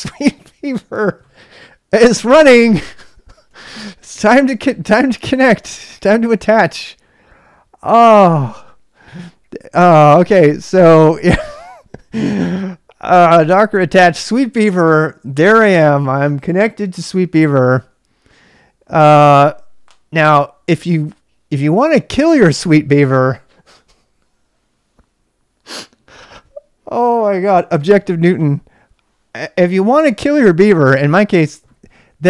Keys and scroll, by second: 3.2 ctrl+[, 3.4 k, 4.1 k, 13.1 Return.